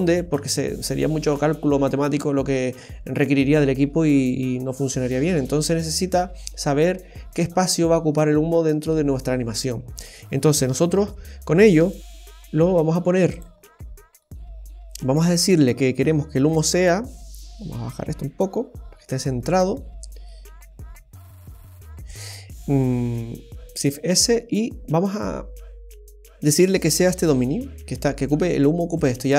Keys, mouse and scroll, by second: 10.7 middle click, 13.6 middle click, 16.7 middle click, 19.4 middle click, 23.0 shift+s, 29.2 middle click.